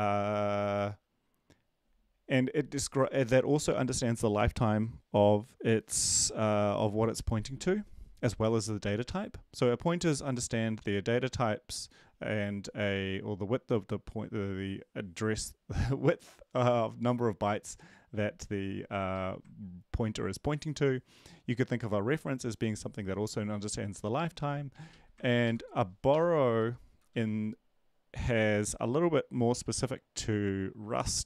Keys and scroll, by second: 19.1 ctrl+shift+Left, 25.2 ctrl+shift+Left, 25.4 ctrl+shift+Left, 26.5 BackSpace.